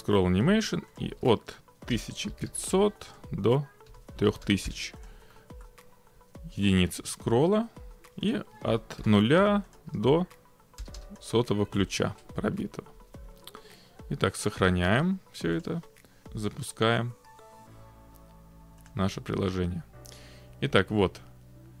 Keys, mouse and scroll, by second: 1.0 click, 1.2-2.4 typing, 3.2 click, 3.9-4.3 typing, 5.1 click, 5.7 middle click, 8.3 click, 9.0 0, 9.8 click, 10.0 1, 11.1 BackSpace, 11.2 click, 14.6 click, 15.7 click, 16.2 click, 19.0 click, 20.7-21.8 scroll.